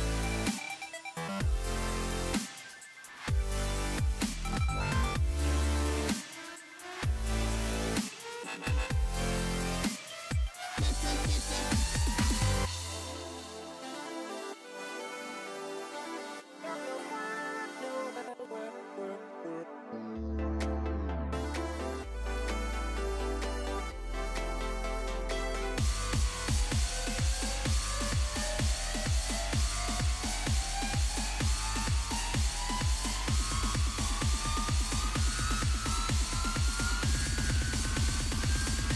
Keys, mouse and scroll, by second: 0.8 alt+scroll up 1, 1.5 alt+scroll up 1, 1.5 space, 1.7 click, 2.5 alt+scroll up 1, 3.0 space, 4.3-6.4 drag, 9.0 shift+x, 9.6 click, 10.8 shift+x, 11.4 click, 13.0 [, 13.2 [, 13.5 [, 13.7 [, 14.6 click, 16.2 z, 17.4 ], 17.7 ], 18.2 click, 21.9-22.5 alt+scroll down 2, 24.0 click, 27.2 ctrl+click, 29.8 b, 32.1-33.4 drag, 34.3 alt+scroll up 1, 35.0 alt+scroll up 1, 35.6 click, 36.7 ctrl+z, 38.1 click, 38.2-38.9 drag.